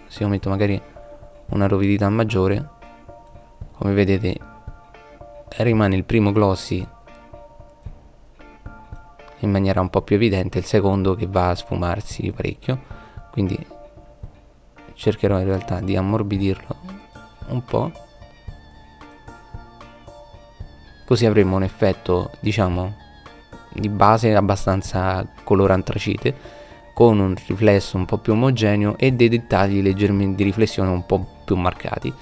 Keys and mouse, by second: 1.4 middle click, 2.2 middle click, 9.9-10.9 drag, 11.2 middle click, 13.1 middle click, 13.7 middle click, 17.3 middle click.